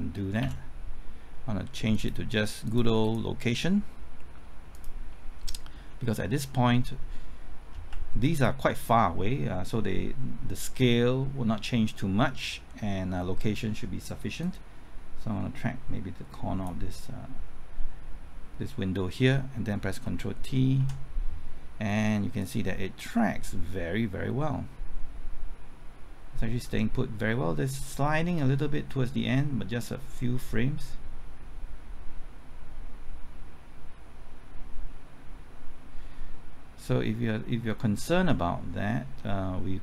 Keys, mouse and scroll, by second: 0.4 ctrl+z, 1.9 click, 5.9-7.6 middle drag, 8.3 ctrl+click, 14.4-17.6 drag, 20.8 ctrl+t, 22.4-31.6 drag, 32.3-39.8 drag.